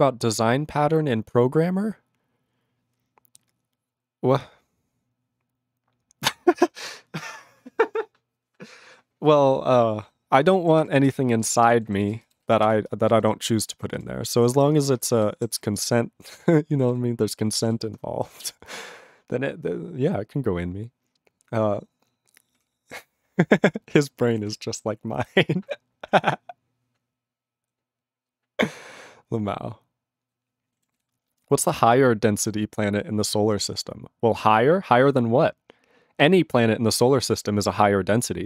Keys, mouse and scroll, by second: 10.7 ctrl+s, 11.0 ctrl+space, 11.5 ctrl+alt+b, 11.6 ctrl+g, 12.0 ctrl+s, 12.2 ctrl+space, 12.5 ctrl+alt+b, 12.6 ctrl+g, 12.9 ctrl+space, 13.3 ctrl+alt+f, 14.4 ctrl+f, 14.6 ctrl+space, 15.0 ctrl+alt+f, 15.1 ctrl+g, 15.5 ctrl+s, 15.7 ctrl+f, 16.9 ctrl+s, 17.6 ctrl+s, 22.5 ctrl+l, 23.1 ctrl+s, 24.5 ctrl+s, 30.9 ctrl+s.